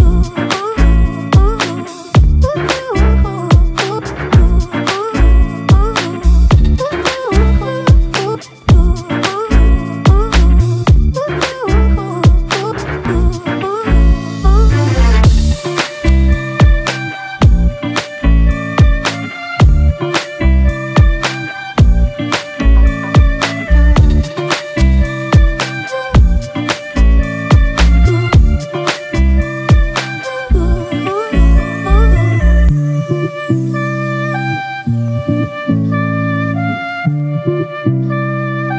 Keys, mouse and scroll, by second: 4.5 ], 4.5 double click, 26.5 alt+click, 28.2-28.7 ], 29.4 ].